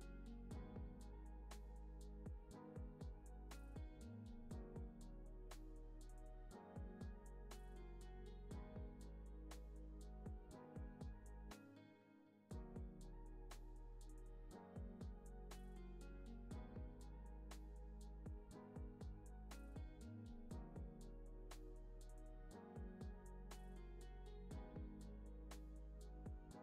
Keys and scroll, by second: 9.4 super+s, 10.8 super+=, 12.1 space, 23.2 v, 24.8 space.